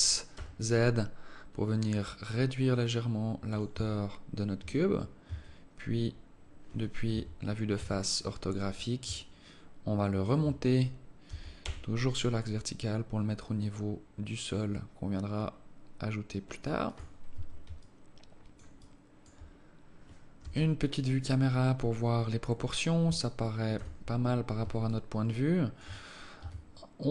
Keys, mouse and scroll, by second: 3.7 Tab, 5.3 Tab, 7.1 KP_1, 7.8 KP_5, 8.4-8.8 scroll up 4, 9.1 alt+shift+click, 11.3 g, 17.3 Tab, 17.8 alt+click, 18.8 alt+click, 19.6-20.3 scroll down 1, 20.4 KP_0, 23.7 KP_7, 24.9 alt+shift+click, 26.0 scroll up 2, 26.4 Tab.